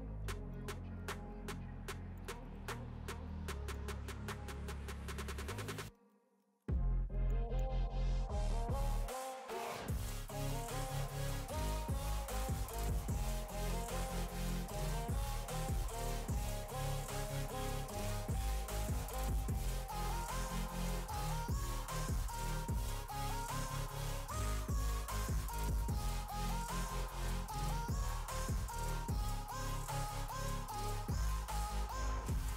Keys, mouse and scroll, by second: 2.6 click, 3.2 shift+a, 4.5 shift+a, 5.4 click, 5.7 drag, 7.0-8.9 drag, 9.9 a, 11.5 click, 12.6 r, 13.7 click, 14.2 click, 14.9 r, 16.7 click, 17.1 click, 18.3 scroll down 3, 18.6 click, 19.7 click, 20.0 scroll up 5, 20.7 click, 21.5 click, 22.8 click, 23.3-24.8 drag, 26.4 click, 27.5 click, 27.8 r, 29.2 click, 30.0 click, 30.5 click, 30.9 click, 31.6 click, 32.4 click.